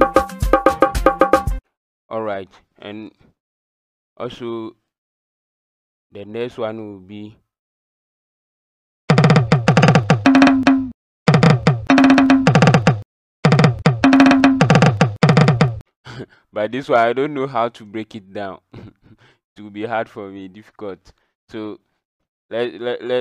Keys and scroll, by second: 0.0-0.6 typing, 9.0-15.3 typing.